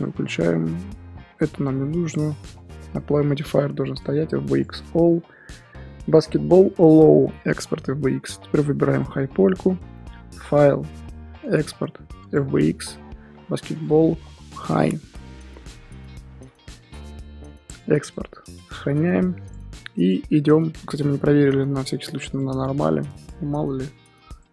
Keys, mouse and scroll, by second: 9.0 click, 12.4-18.7 drag, 20.3 scroll down 2, 20.5-20.8 middle drag, 20.8 click, 23.1-23.7 drag, 23.7 g.